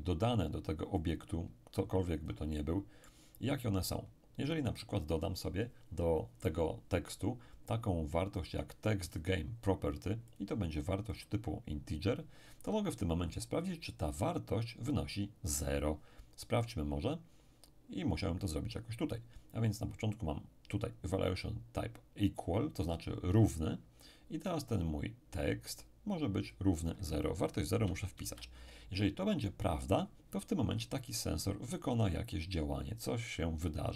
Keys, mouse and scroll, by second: 1.0-4.0 drag, 2.6-4.0 middle drag, 9.1 click, 10.3 click, 24.4-26.5 drag, 26.8 click, 27.7 0, 28.2 Return.